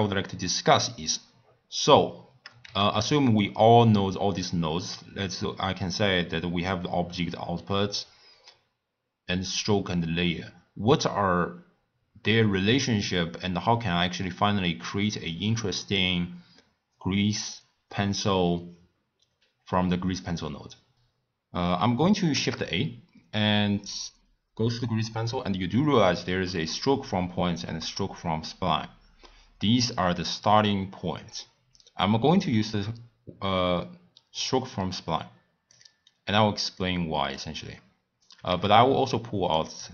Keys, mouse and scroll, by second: 2.6 shift+a, 22.3 shift+a, 36.7-38.4 drag, 38.4 shift+a.